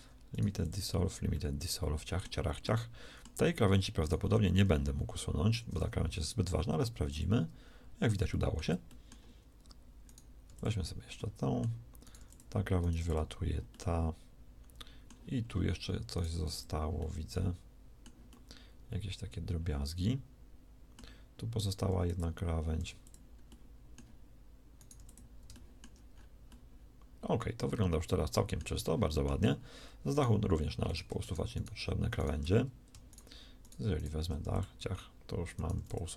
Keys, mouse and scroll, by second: 0.5 x, 3.0 middle click, 4.5 g, 5.8 g, 6.0 x, 10.4 x, 12.9 x, 21.8 x, 22.7 x, 24.9 x, 34.5 x, 35.7 x.